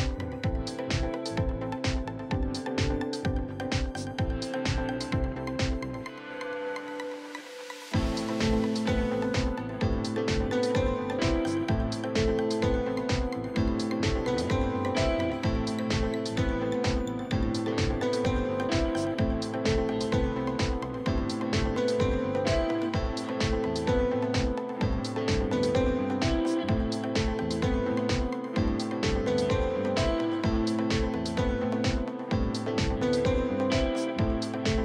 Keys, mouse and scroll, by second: 0.7 click, 1.2 r, 1.6 click, 3.7 click, 4.1 r, 4.4 click, 5.9 r, 6.3 click, 6.8 shift+middle click, 7.1 e, 7.4 click, 7.8 r, 8.1 click, 8.8 r, 9.6 click, 9.9 r, 10.9 s, 11.8 click, 12.1 r, 12.5 click, 13.6 alt+click, 13.9 r, 14.3 click, 16.9 click, 18.2 r, 18.6 click, 19.3 e, 19.6 click, 20.3 r, 20.8 click, 21.2 e, 21.5 click, 21.8 r, 22.7 click, 23.2-26.6 typing, 23.5 click, 24.1 click, 24.9 click, 26.2 click, 27.5 click, 27.8 r, 28.2 s, 29.1 click, 29.8 e, 30.1 click, 30.4 r, 31.3 click, 32.3 click, 32.8 r, 33.1 click, 33.8 e, 34.1 click, 34.5 r.